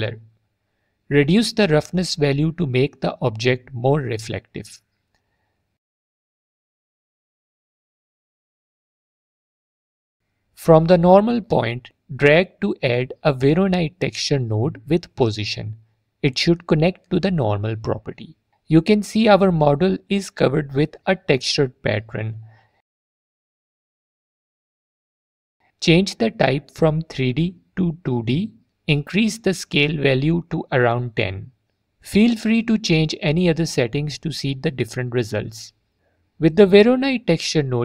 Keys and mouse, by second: 2.0-3.8 drag, 6.3 middle click, 8.9 middle click, 10.8-11.3 drag, 15.8 click, 16.9 click, 21.2 alt+click, 25.6-26.4 drag, 30.6-32.5 drag, 33.8 alt+drag, 35.4 middle click, 36.1-37.3 middle drag, 37.7 click.